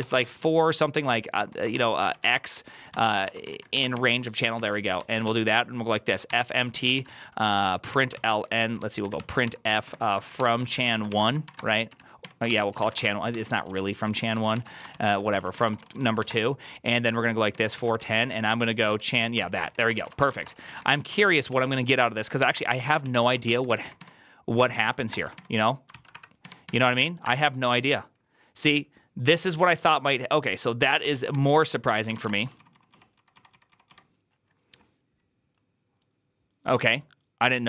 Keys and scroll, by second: 0.0-16.3 typing, 7.8 Tab, 17.4 Tab, 17.5 Return, 17.6-20.8 typing, 17.8 ctrl+c, 17.9 ctrl+c, 21.0 ctrl+c, 21.2 ctrl+c, 21.4 ctrl+c, 22.0-25.7 typing, 24.5 Tab, 24.7 Tab, 25.8 ctrl+c, 26.0 Up, 26.3 Tab, 26.5 Tab, 26.8 Tab, 27.1 Return, 31.0 ctrl+a, 31.2-34.0 typing, 31.4 ctrl+c, 31.6 ctrl+c, 31.7 ctrl+c.